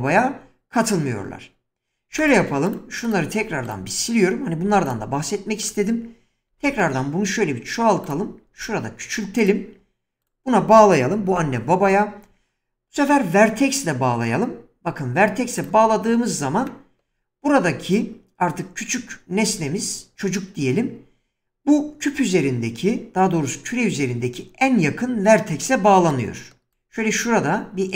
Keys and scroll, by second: 4.7 x, 6.5 shift+d, 8.5 s, 11.3 ctrl+p.